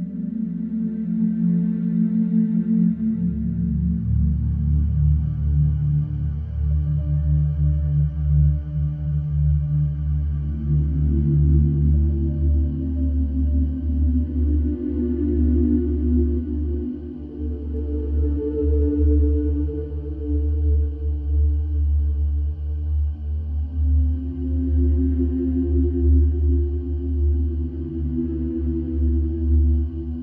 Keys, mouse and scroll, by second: 0.0 right click, 2.0 alt+middle click, 4.6 right click, 7.3 click, 8.5 KP_2, 8.7 KP_4, 8.9 KP_0, 10.5 click, 12.0 click, 14.7 click, 15.5 e, 17.2 click, 19.4 right click, 21.5 click, 22.3 F3, 23.0 click, 26.4 alt+middle click, 27.6 click, 28.7 alt+F3, 30.0 click.